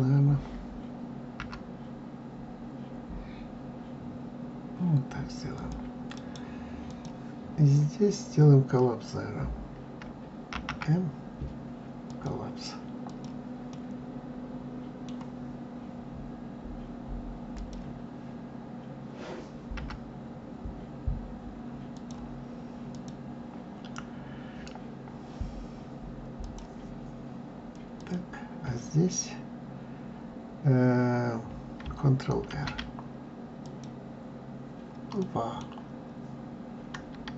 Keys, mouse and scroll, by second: 1.4 g, 6.1-9.1 right drag, 10.5 alt+m, 13.0 click, 13.7-16.7 middle drag, 17.5 click, 19.7 g, 22.9 click, 26.4 click, 27.9 click, 32.5 ctrl+r, 35.2 middle click, 35.9-37.3 scroll up 2.